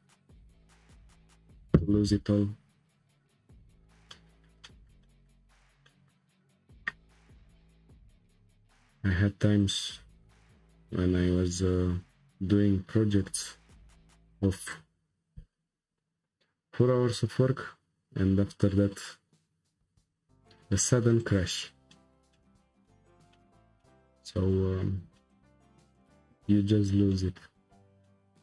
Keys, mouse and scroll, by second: 4.2-5.4 shift+middle drag, 5.4-5.8 scroll up 2, 5.8-7.6 shift+middle drag, 7.6 click, 9.6-12.6 drag, 21.9-25.6 shift+middle drag, 25.6-26.0 scroll up 2, 26.0-27.6 shift+middle drag, 27.6-28.1 scroll up 1, 28.1-28.4 middle drag.